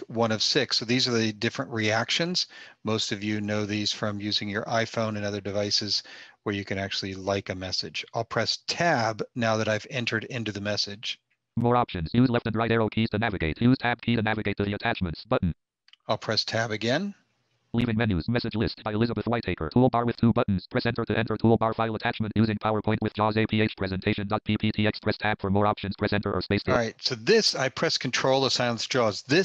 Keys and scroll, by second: 8.0 Tab, 10.6 Tab.